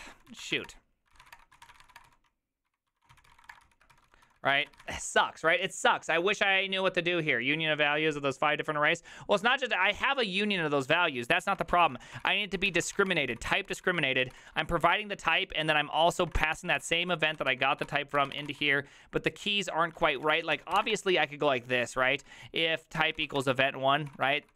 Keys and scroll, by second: 0.0-5.4 typing, 11.5-19.0 typing, 20.0-24.5 typing.